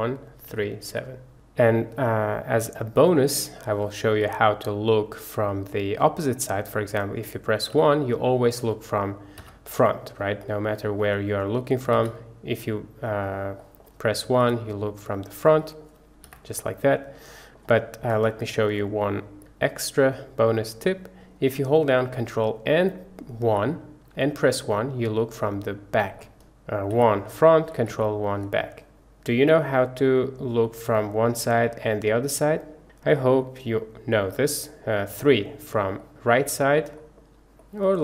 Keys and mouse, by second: 0.0-0.9 typing, 2.7-3.6 middle drag, 4.3 KP_1, 7.8 KP_1, 8.5 click, 9.4 KP_1, 10.5-11.0 drag, 12.0 KP_1, 13.7 middle drag, 14.4 KP_1, 15.6 middle drag, 16.3 KP_1, 17.3 shift+middle click, 18.3 shift+click, 19.7 shift+click, 23.5 ctrl+KP_1, 26.2 middle drag, 27.0 KP_1, 28.0 ctrl+KP_1, 30.9 KP_3, 35.2 KP_3, 36.0-36.5 middle drag, 37.0 middle click, 37.7-38.0 middle drag.